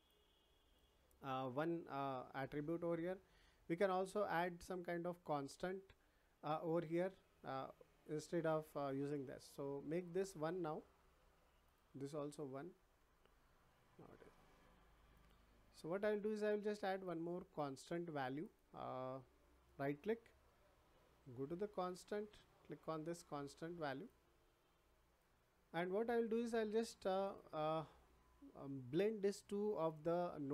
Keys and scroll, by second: 11.2 1, 12.7 Return.